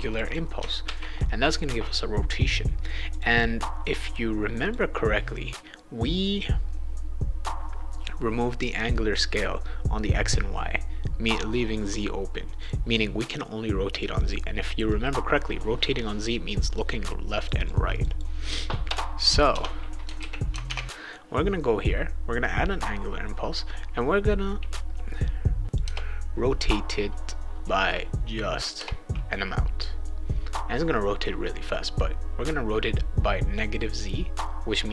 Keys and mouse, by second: 0.1 click, 0.2 click, 0.8 ctrl+s, 3.1 click, 3.2 click, 4.6 click, 12.6 click, 14.9-16.7 drag, 17.4 click, 17.5 click, 17.9 click, 18.1 click, 20.2 ctrl+s, 20.6 alt+Tab, 24.7-25.7 drag, 25.8 BackSpace, 27.9 click, 28.7 BackSpace.